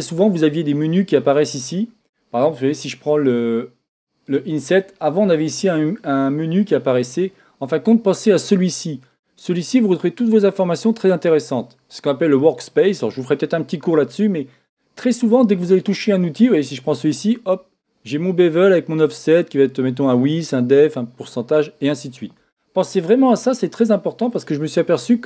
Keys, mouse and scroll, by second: 4.3 click, 9.0 click, 16.5 click, 19.1-24.9 drag.